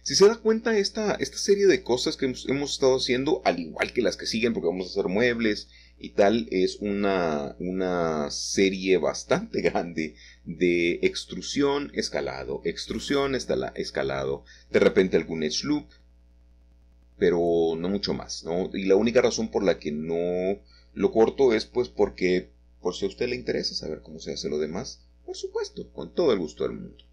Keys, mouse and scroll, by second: 0.0 click, 2.4 click, 3.3 click, 4.3 middle click, 5.3 middle click, 5.3 middle click, 5.5 middle click, 6.1-6.5 scroll up 1, 7.5-9.2 middle drag, 9.3 a, 10.6 alt+shift+click, 11.4 middle click, 11.8 typing, 12.0-13.8 middle drag, 13.8-15.7 typing, 14.1 Escape, 17.4-19.3 middle drag, 21.5 Tab, 23.7 e, 25.5-27.1 middle drag.